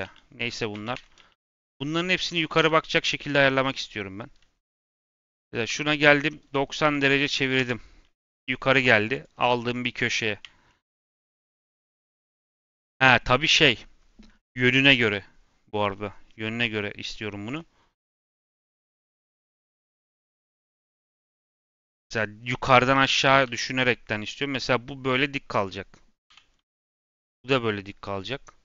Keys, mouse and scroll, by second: 0.5 Tab, 0.7 a, 0.9 Tab, 1.1 a, 1.3 click, 2.8 scroll down 1, 3.0 middle click, 4.7 click, 5.6 l, 6.1 r, 8.1 g, 9.4 g, 10.6 middle click, 10.8-11.2 scroll up 2, 11.2 middle click, 11.7 scroll up 1, 11.8-13.2 middle drag, 13.2-13.5 scroll down 2, 13.5-17.4 middle drag, 17.4 click, 17.7-18.4 scroll up 1, 18.4 click, 19.0 k, 19.5-20.8 right drag, 20.8 l, 23.4 g, 25.5 click, 26.2 l, 27.2 g.